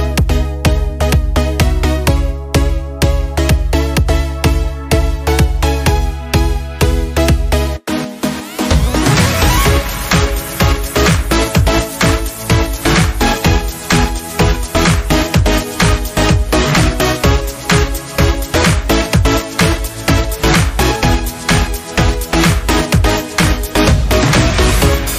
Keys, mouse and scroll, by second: 4.8-10.6 drag, 10.6 Down, 12.2 scroll up 1, 12.5 click, 14.9 ctrl+Num_Lock, 15.4 ctrl+c, 17.6 click, 20.6 ctrl+f, 22.2 click.